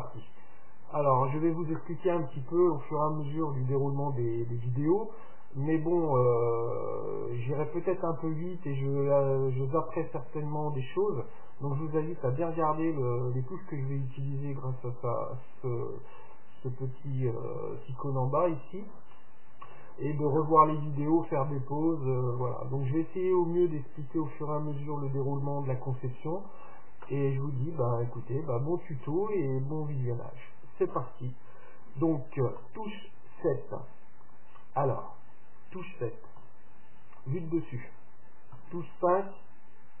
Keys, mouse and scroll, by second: 32.7 KP_7, 32.7 KP_8, 34.3-36.3 drag, 36.4 KP_7, 38.6 KP_5.